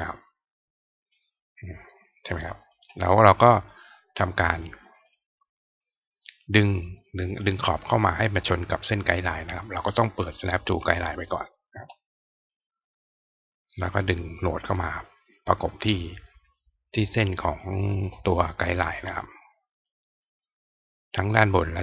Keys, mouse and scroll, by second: 2.3 click, 2.7 right click, 4.5 click, 9.9 click, 11.2 click, 12.5 click, 13.7-14.7 drag, 17.5 click, 19.8 click.